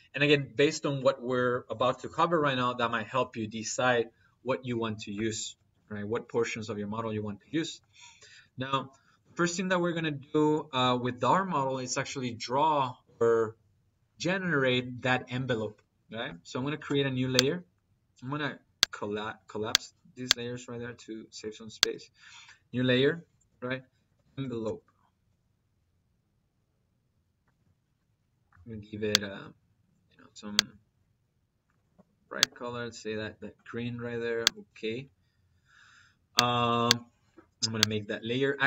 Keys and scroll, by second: 23.8 e, 24.1 v, 25.0 p, 27.3 Return.